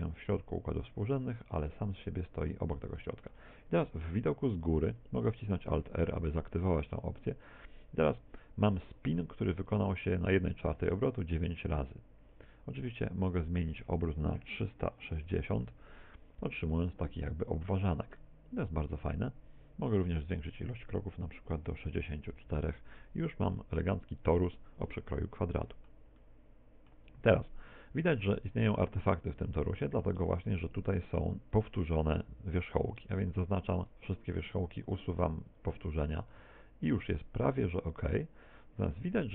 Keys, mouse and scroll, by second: 1.6 Tab, 2.1 middle click, 2.7 middle click, 4.0 KP_7, 5.5 alt+r, 6.9 middle click, 8.1 middle click, 13.4 click, 17.3 middle click, 18.2 middle click, 20.4 click, 24.9 middle click, 26.3 middle click, 27.0 Tab, 29.1 middle click, 30.5 Tab, 33.2 a, 36.4 Tab, 37.1 middle click.